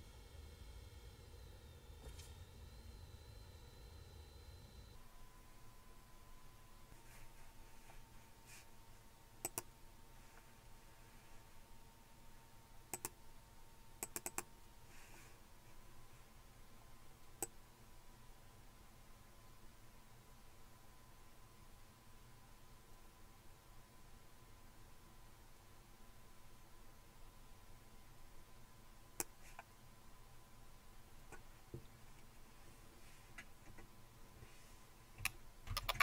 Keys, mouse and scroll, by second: 9.4 click, 12.9 click, 14.0 click, 17.4-29.3 drag, 35.7 super+t.